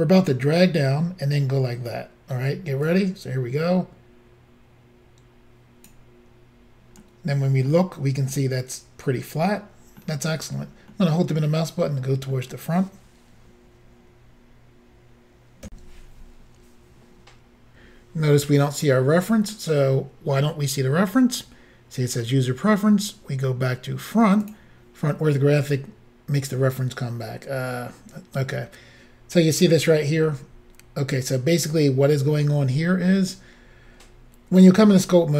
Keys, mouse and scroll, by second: 2.9 click, 7.1 middle click, 8.4 middle click, 11.0 middle click, 15.7 Insert, 24.5 click.